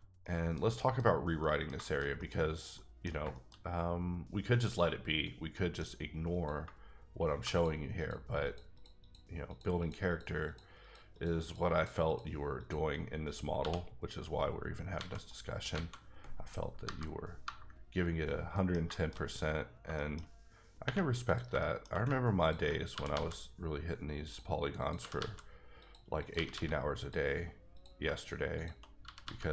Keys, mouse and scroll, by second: 0.2 middle click, 2.7 middle click, 3.2 shift+middle click, 3.3 shift+scroll down 2, 4.6-5.5 scroll down 2, 5.5 middle click, 6.3 click, 6.6 shift+click, 7.4 shift+click, 8.0 shift+double click, 8.4 shift+click, 8.7 shift+click, 9.0 shift+double click, 9.2 double click, 9.5 shift+click, 9.8 shift+click, 10.1 shift+double click, 10.5 shift+click, 11.1 shift+double click, 11.4 shift+click, 11.7 shift+click, 12.1 shift+double click, 12.6 shift+click, 13.6 f, 15.0 alt+a, 15.3 middle click, 15.7 a, 16.8 KP_Divide, 18.5 middle click, 18.8 shift+middle click, 19.1-19.8 shift+scroll up 4, 20.1 shift+middle click, 20.5 scroll down 1, 20.8 1, 21.3 click, 21.5 shift+click, 21.6 shift+middle click, 21.9 middle click, 22.4 ctrl+click, 22.8 click, 22.9 g, 23.1 g, 24.2 click, 24.8 click, 25.0 g, 25.1 g, 25.8 click, 26.2 click, 26.3 g, 26.5 g, 27.0 click, 27.7 click, 28.1 shift+click, 28.5 shift+double click, 29.0 g, 29.3 g.